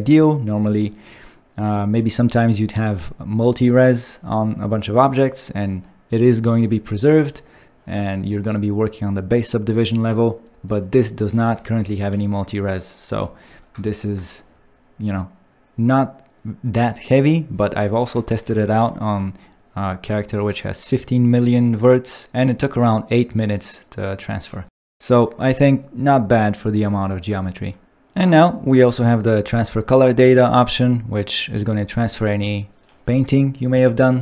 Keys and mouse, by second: 11.6 ctrl+click, 18.2 ctrl+middle click, 24.7 shift+middle click, 28.7 click, 32.7-34.2 drag.